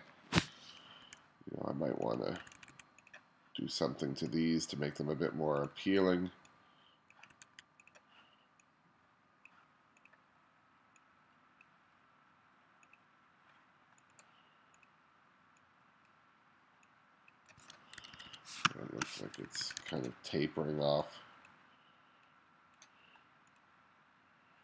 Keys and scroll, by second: 1.1 2, 2.5 2, 7.4 2, 18.1 1, 18.7 space, 19.5 2.